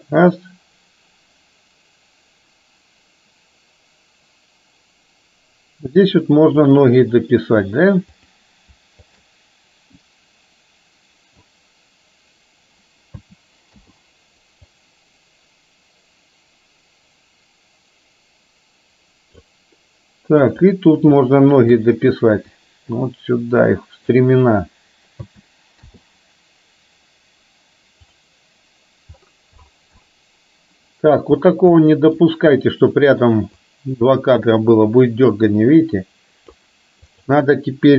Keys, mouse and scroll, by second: 9.1 shift+click, 10.2-11.6 drag, 13.3 a, 13.8 i, 14.8-19.6 drag, 20.5-20.8 drag, 21.6-22.0 shift+drag, 22.7-24.3 drag, 25.2 a, 25.8 i, 31.8 middle click, 33.7-36.7 drag, 37.1 click.